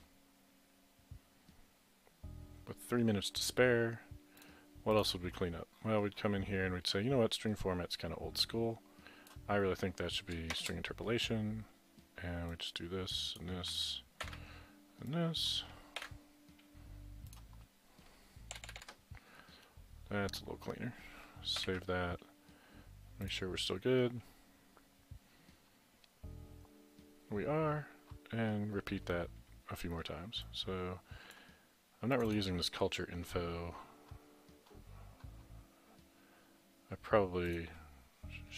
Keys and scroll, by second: 0.1-0.9 typing, 2.3-3.1 typing, 14.2 ctrl+x, 16.0 ctrl+v, 18.6 Delete, 18.7 Delete, 18.8 Delete, 21.6 ctrl+s.